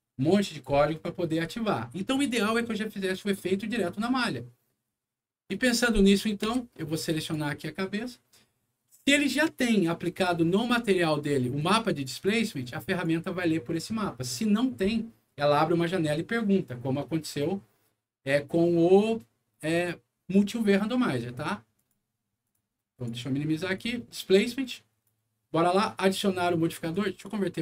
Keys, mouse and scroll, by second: 5.4 click, 6.0 click, 6.4 w, 7.1 click, 10.1 click, 11.2 scroll up 1, 11.5 click, 12.8 click, 19.7 click, 21.7 click, 22.4 click, 22.9 click, 23.6 click, 24.4 click, 26.8 right click.